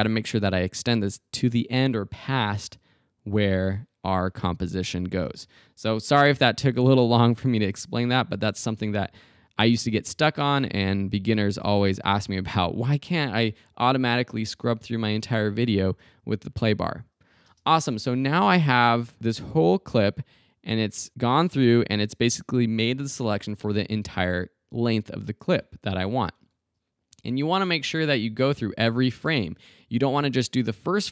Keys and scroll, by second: 5.3 space, 17.5 space.